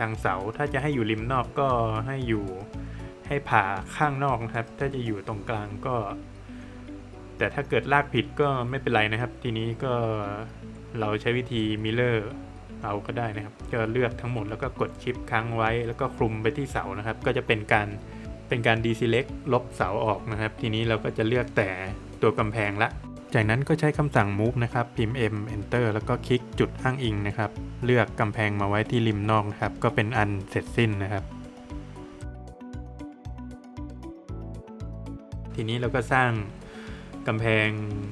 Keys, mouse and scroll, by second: 0.6 scroll up 1, 2.8 scroll down 1, 3.6 middle click, 4.7 click, 5.5 scroll up 1, 6.3 scroll down 1, 6.5 middle click, 7.4-7.7 scroll up 1, 8.6 space, 9.0 scroll down 1, 9.2 middle click, 9.6-10.0 scroll down 1, 10.0 Escape, 11.0 click, 12.4 scroll up 1, 13.9 shift+click, 14.3 shift+double click, 15.2 middle click, 16.5 shift+click, 17.7 scroll down 1, 17.9 middle click, 18.2 shift+double click, 18.7 middle click, 19.7 shift+click, 20.1 shift+double click, 20.7-21.3 scroll down 2, 20.9 middle click, 21.5 middle click, 21.7 scroll up 1, 22.8 middle click, 24.2 space, 24.7 scroll up 1, 26.2 click, 28.1-28.5 scroll down 1, 28.7 middle click, 29.1 scroll down 1, 29.2 middle click, 29.9 middle click, 30.9 middle click, 32.2 click, 32.8-33.1 scroll up 1, 34.1 click, 34.6 scroll up 1, 36.2 scroll up 1, 36.3 click, 36.5-37.2 scroll down 1, 37.7 scroll up 1.